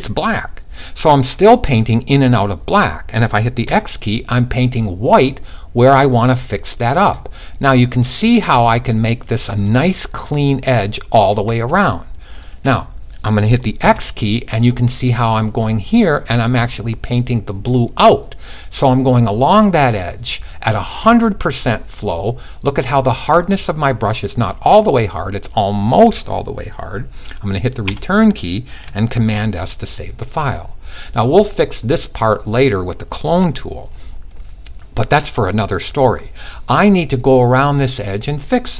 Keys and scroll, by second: 3.2 x, 13.3 x, 28.7 s.